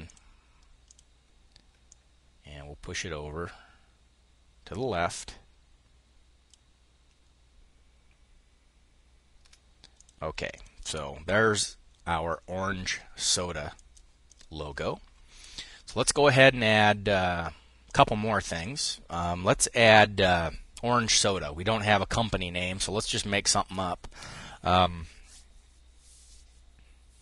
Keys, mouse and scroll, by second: 1.3-9.7 ctrl+drag, 10.0 click, 13.2 click, 13.7 click, 17.3 click.